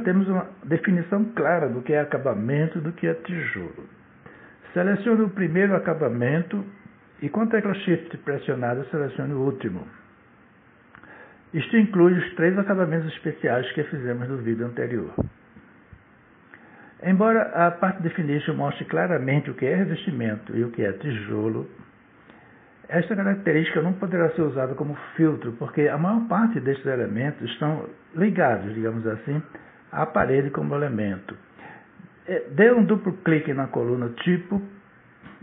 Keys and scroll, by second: 31.0 space.